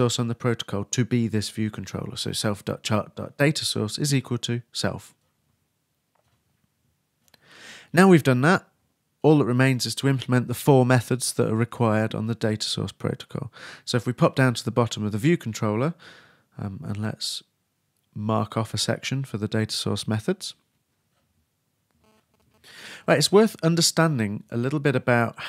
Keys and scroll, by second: 15.6 shift+Return, 17.2-19.3 typing.